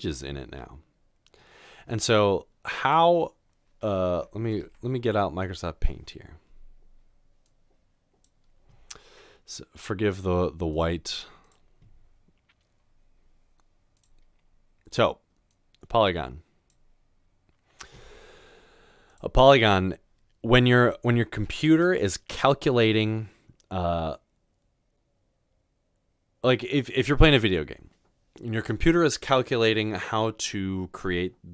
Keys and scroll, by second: 4.5-5.5 typing, 7.1-7.9 typing.